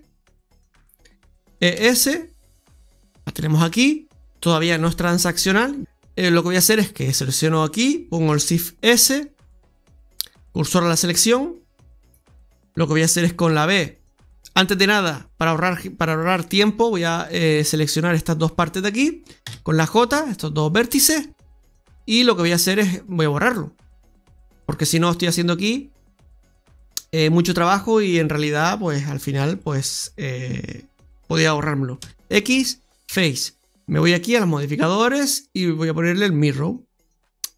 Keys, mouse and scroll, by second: 1.4 e, 4.0-4.6 scroll down 2, 4.6 middle click, 6.0 right click, 7.1 right click, 8.2 shift+s, 13.4 b, 16.1 right click, 17.1 shift+right click, 19.3 j, 23.3 click, 29.5 shift+right click, 31.9 x, 34.5 click, 35.0 click.